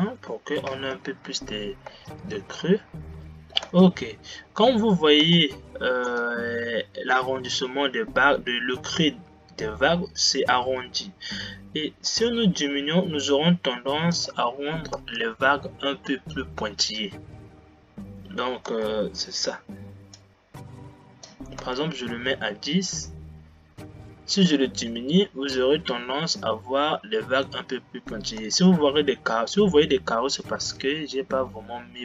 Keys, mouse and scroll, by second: 1.4 Left, 2.2 space, 4.2 space, 15.2 space, 19.2 space, 20.4-21.8 drag, 21.8 space, 28.9 space.